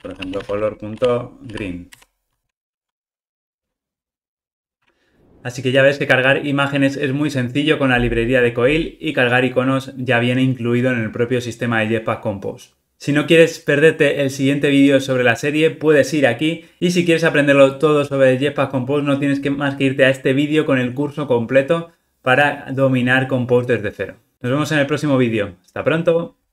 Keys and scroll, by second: 2.4 ctrl+r.